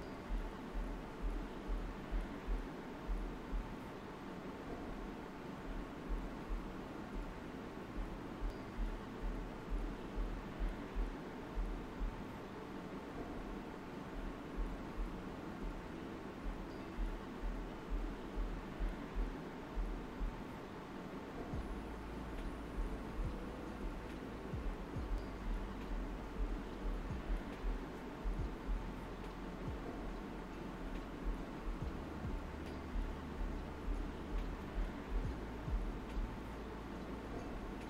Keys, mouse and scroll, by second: 3.7 alt+right click, 8.5 middle click, 8.5 middle click, 10.5 click, 10.9 right click, 13.3 alt+right click, 14.4-24.4 drag, 25.7 alt+right click, 26.4 alt+right click, 27.9 alt+right click, 28.7 alt+right click, 29.9 middle click, 31.8 alt+click, 32.2-34.9 alt+right drag, 37.6-37.8 drag.